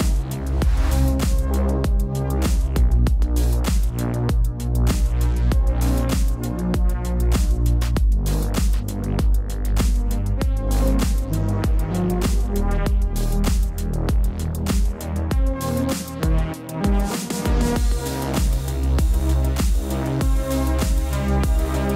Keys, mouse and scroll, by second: 0.0 click, 0.8 click, 3.3 click, 3.5 ctrl+c, 3.8 typing, 4.8 click, 5.6 v, 6.1 click, 6.8 shift+click, 7.9 ctrl+g, 8.9 click, 11.7 ctrl+v, 13.9 click, 17.1 right click, 18.4 click, 19.5 click.